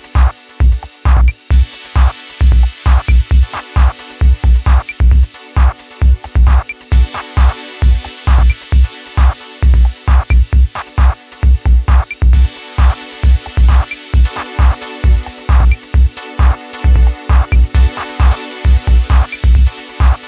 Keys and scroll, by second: 4.7 ctrl+KP_Add, 9.3 Delete, 12.3 Delete, 17.5 Delete, 18.9 ctrl+d, 19.6 ctrl+KP_Subtract, 19.7 ctrl+KP_Subtract, 19.8 ctrl+KP_Subtract.